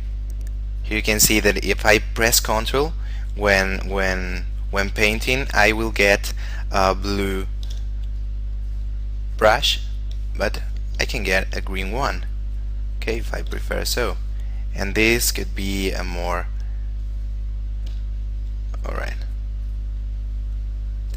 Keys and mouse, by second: 0.3 ctrl+click, 1.1 ctrl+click, 2.3 ctrl+click, 3.5 ctrl+click, 4.1 ctrl+click, 8.4 click, 11.5 ctrl+click, 12.1 ctrl+click, 14.1 click, 17.9 click, 18.4 ctrl+click, 19.6 click.